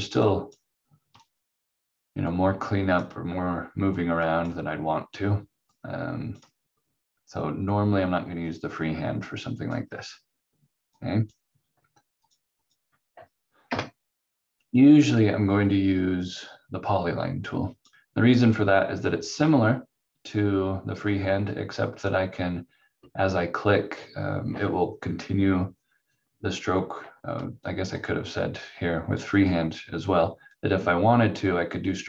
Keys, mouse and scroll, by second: 13.7 Delete, 15.1 click, 27.9 click.